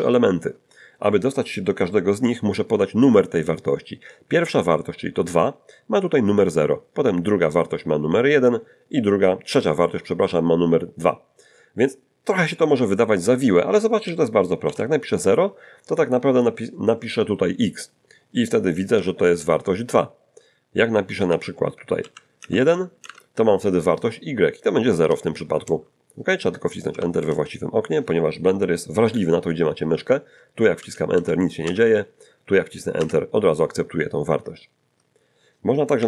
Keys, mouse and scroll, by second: 13.2 [, 13.7 0, 13.8 ], 18.0 Return, 20.4 Up, 20.8 Left, 21.0 Left, 21.3 Right, 21.7 BackSpace, 21.9 2, 22.4 BackSpace, 23.1 1, 24.5 Return, 27.0 Return, 30.5 Return, 30.9 Return, 31.3 Return, 32.6 Return, 35.9 Up.